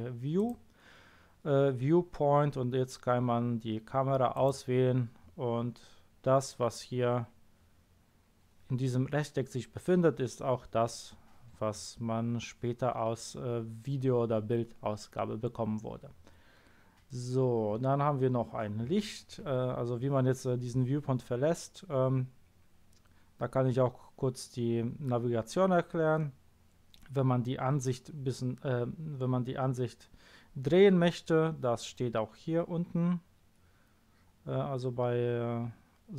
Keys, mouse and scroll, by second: 0.4 click, 4.3 click.